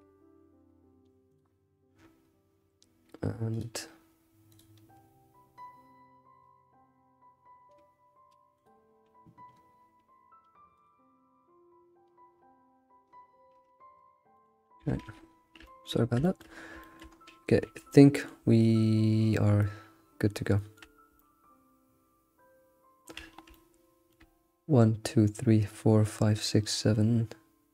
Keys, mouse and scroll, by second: 15.4-16.2 scroll down 3, 15.6 shift+middle click, 16.2-17.1 shift+middle drag, 17.1 scroll up 3, 17.5 a, 17.9-20.8 shift+middle drag, 20.8-21.2 scroll down 1, 21.2-23.3 shift+middle drag, 23.3 scroll down 3, 23.5-26.5 shift+middle drag.